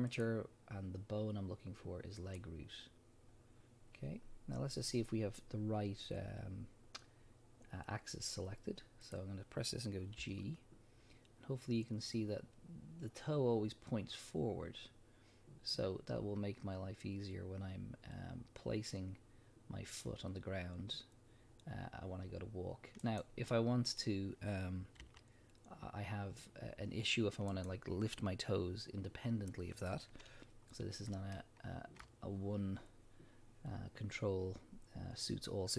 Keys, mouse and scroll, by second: 10.2 g, 23.2 right click, 23.9 click, 25.0 r, 27.7 right click, 30.5 scroll down 1, 31.3-35.7 shift+middle drag.